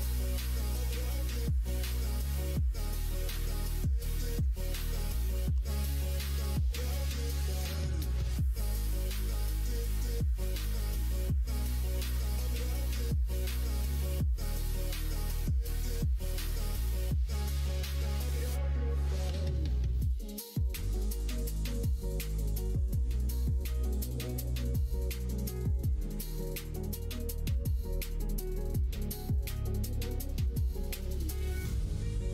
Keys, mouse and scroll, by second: 5.5 KP_1, 5.9 KP_3, 8.8 ctrl+right click, 10.5 ctrl+z, 14.7 g, 18.6 ctrl+right click, 20.9 ctrl+right click, 25.4 ctrl+right click, 26.6 ctrl+right click, 30.0 shift+middle click.